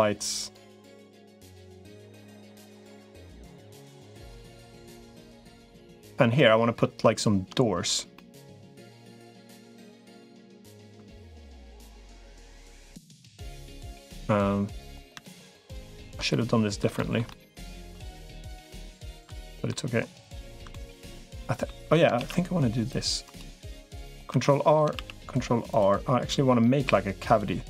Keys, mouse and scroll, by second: 1.8 g, 4.1 middle click, 4.9 middle click, 5.8 click, 6.1 middle click, 8.0 middle click, 8.9 middle click, 10.1 middle click, 11.0 shift+click, 12.4 shift+click, 12.8 shift+click, 13.6 middle click, 15.2 shift+click, 16.1 middle click, 16.8 shift+middle click, 17.1 middle click, 18.6 shift+middle click, 19.2 middle click, 20.2 shift+click, 20.5 middle click, 22.0 ctrl+r, 23.7 middle click, 24.2 Escape, 24.8 ctrl+r.